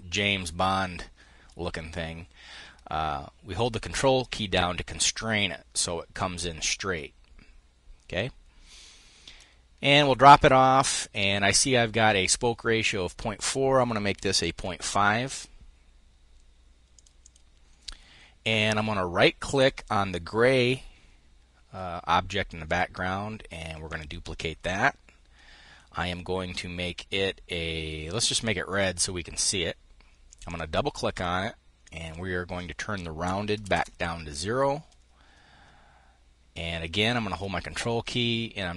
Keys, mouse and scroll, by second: 10.8 click, 14.2 5, 14.4 Return, 16.6 click, 19.1 click, 22.3 click, 23.5 click, 27.8 click, 29.9 click, 31.4 click, 33.2 0, 33.4 KP_Enter, 36.7-38.7 ctrl+drag.